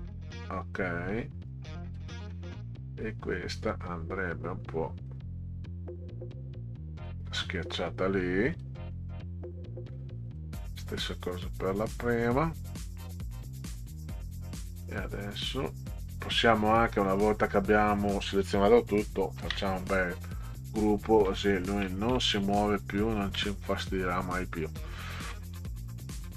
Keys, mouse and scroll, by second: 1.9 click, 3.6 click, 5.1-7.1 drag, 8.5 click, 10.3 click, 11.3-12.3 drag, 12.5 scroll down 2, 13.6 click, 14.8-16.1 drag, 19.4 ctrl+g, 21.3 Left, 22.1 Left, 23.4 Left.